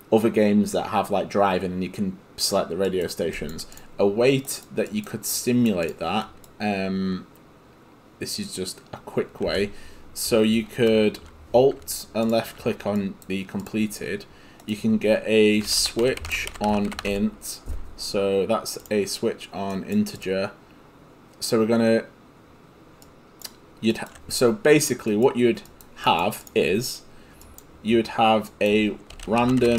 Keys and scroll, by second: 15.4-17.6 typing, 29.1-29.7 typing.